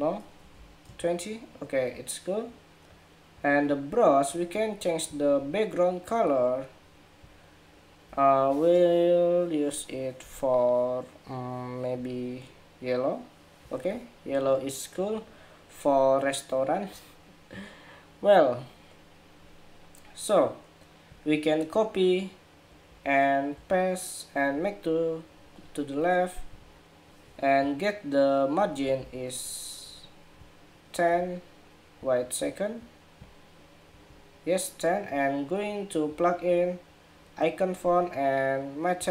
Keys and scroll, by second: 22.6 super+c, 23.3 super+v, 28.7 super+=.